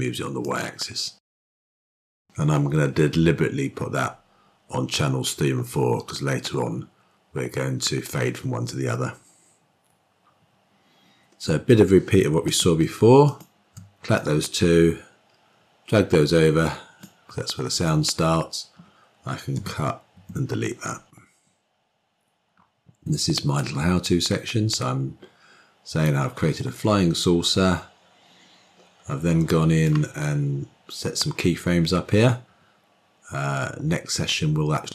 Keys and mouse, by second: 12.3 click, 14.0-16.9 drag, 19.6 k, 20.0 Delete, 23.5-29.9 drag.